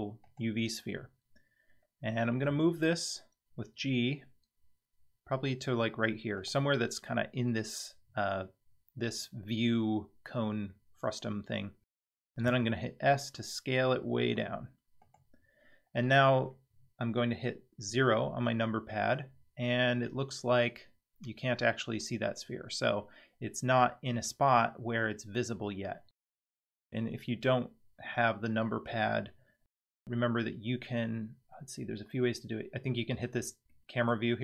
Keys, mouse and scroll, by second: 2.5 g, 12.4 s, 17.9 KP_0, 33.7-34.1 middle drag.